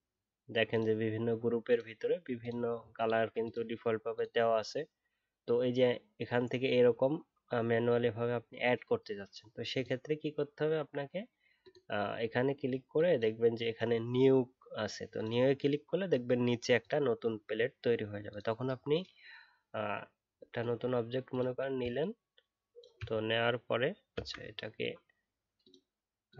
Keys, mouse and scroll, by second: 21.9 shift+click.